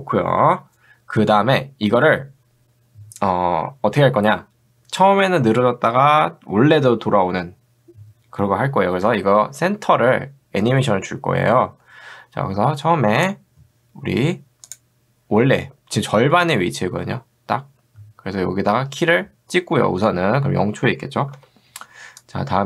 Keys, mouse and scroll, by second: 13.2 click, 22.4-22.6 drag.